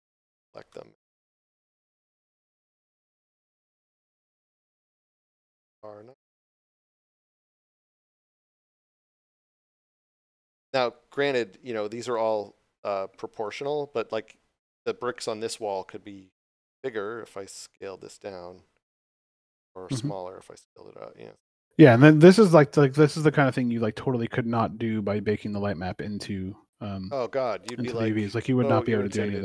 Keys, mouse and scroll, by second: 0.8 shift+middle click, 1.2 scroll up 1, 2.5 shift+click, 3.6 shift+click, 5.7 r, 7.4 Return, 9.5 shift+middle click, 10.1 scroll up 1, 11.1 middle click, 11.7 scroll up 1, 13.5 scroll down 1, 22.0 scroll down 1, 25.1 middle click, 25.7 shift+middle click, 27.3 right click, 27.8 shift+right click, 28.4 shift+right click.